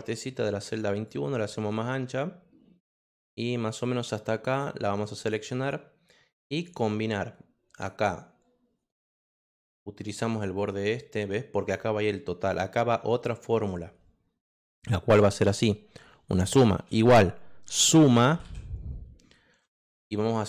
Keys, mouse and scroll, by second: 0.4 click, 3.5-5.3 drag, 6.5 click, 7.7 click, 9.9 click, 10.5 click, 11.6 click, 16.7-18.8 typing, 20.0 click, 20.2 click.